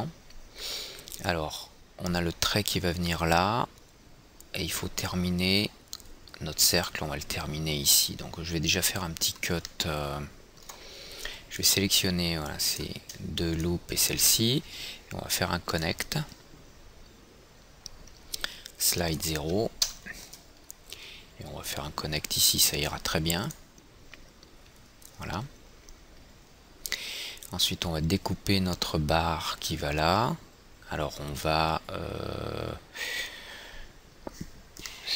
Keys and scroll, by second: 20.3 Tab, 20.3 KP_0.